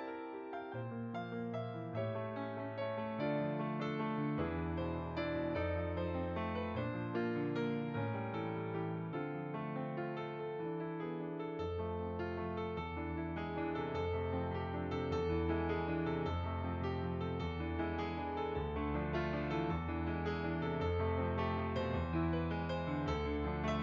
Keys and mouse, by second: 0.6 click, 0.7 click, 2.2-3.2 typing, 2.9 click, 8.1 f, 8.3 click, 22.9 middle click, 23.6 click.